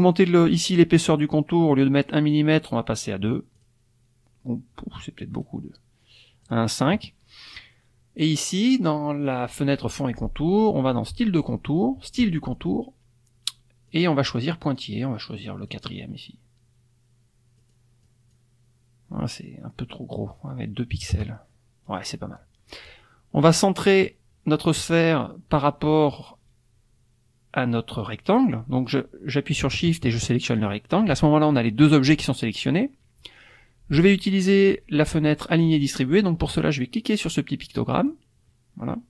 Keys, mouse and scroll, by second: 2.0 right click, 3.5 click, 5.3 right click, 6.4 click, 11.1 click, 13.9-15.9 drag, 17.6 click, 18.1 click, 20.9 KP_2, 21.1 KP_Enter, 30.4 shift+click, 37.9 click.